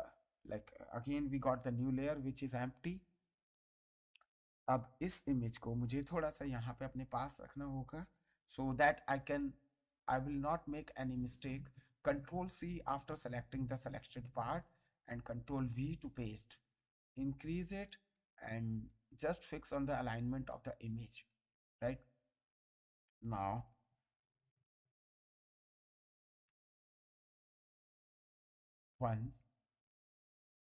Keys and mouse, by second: 1.4 ctrl+d, 4.6 click, 5.8 click, 6.9 click, 8.6 m, 9.3 click, 10.7 ctrl+click, 11.0 ctrl+c, 13.5 ctrl+v, 14.6 ctrl+click, 15.2 ctrl+t, 17.0 click, 18.1 click, 19.7 click, 23.5 b, 28.7 click, 30.5 click.